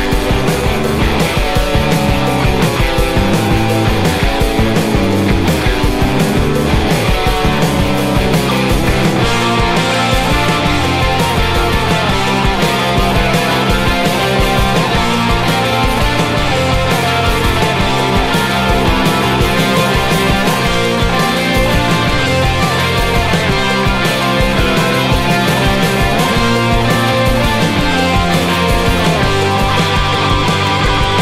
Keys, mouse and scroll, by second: 1.0 u, 1.3 n, 4.9 s, 6.0 a, 6.1 Tab, 7.9 click, 9.1 Tab, 9.4 ctrl+z, 9.7 ctrl+z, 10.4 g, 12.1 s, 13.6 g, 15.3 g, 16.3 a, 16.4 Tab, 17.8 middle click, 19.9-21.8 typing, 20.9 Tab, 21.7 Tab, 23.0 Tab, 23.4 a, 23.7 a, 23.9 r, 24.7 s, 25.9 KP_3, 26.1 s, 26.6 z, 28.2 a, 28.2 c, 28.8 alt+c, 29.1 alt+m, 29.6 z, 29.8 a, 29.9 z, 30.1 z.